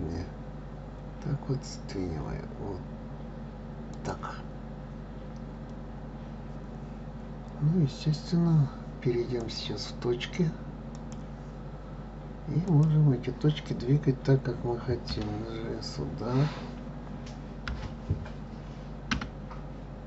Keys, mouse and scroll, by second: 5.7-7.2 scroll up 2, 9.4-12.4 drag, 12.6 click, 15.1 g.